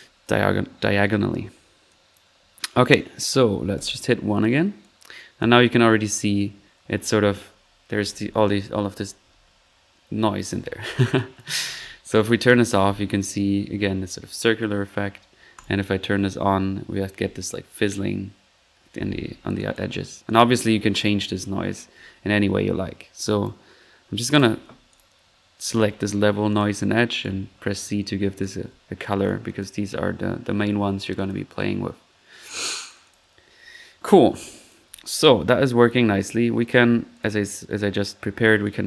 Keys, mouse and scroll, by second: 1.8 click, 2.4 click, 3.7 ctrl+1, 4.4 middle drag, 4.7 middle click, 4.8 click, 5.4-5.8 drag, 9.7-10.3 middle drag, 10.5 1, 11.1-11.7 drag, 12.1 click, 15.5 click, 19.1 middle click, 19.5 click, 20.2 click, 22.8-23.2 middle drag, 23.2 click, 24.3 click, 24.9 drag, 25.6 ctrl+click, 26.5 ctrl+click, 27.2 ctrl+c, 28.2-28.5 typing, 28.3 click, 29.2-29.8 drag, 31.1 click, 33.0 click, 33.7-34.1 drag, 34.5 click, 34.9 ctrl+click, 34.9 typing, 36.6 ctrl+click, 37.1 click, 37.2-37.6 drag, 38.7 click.